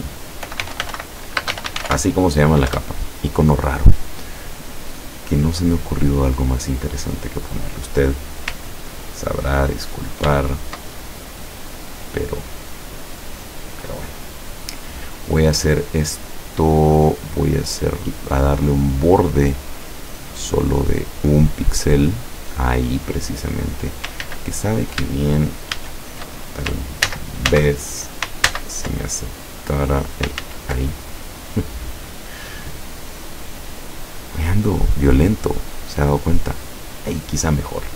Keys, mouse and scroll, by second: 0.3-2.5 typing, 2.8 Return, 6.7-13.6 drag, 17.0 click, 18.7 click, 20.1 click, 21.0 click, 21.7 click, 24.3 ctrl+z, 25.8 ctrl+shift+a, 27.1 ctrl+z, 28.5 ctrl+z, 29.9 click, 30.5 ctrl+z, 31.9 click, 33.7 click, 35.1 click, 35.8 click.